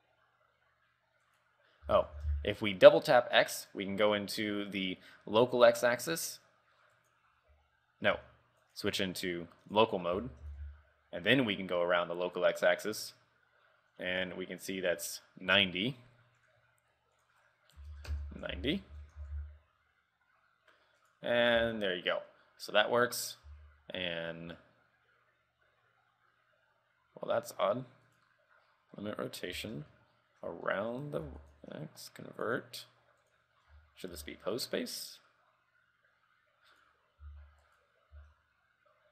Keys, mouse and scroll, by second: 2.0 r, 7.8-8.1 scroll up 2, 8.8 click, 9.1 click, 10.3 r, 16.7 click, 17.3 ctrl+click, 19.2 r, 21.4-21.7 scroll down 4, 21.7 r, 23.7 r, 29.3-29.7 scroll up 2, 29.7 shift+middle click, 30.1 middle click, 30.9 middle click, 31.0 shift+middle click, 31.3 r, 32.6 click, 33.8 KP_3, 34.3 r, 37.4 r, 38.4 r.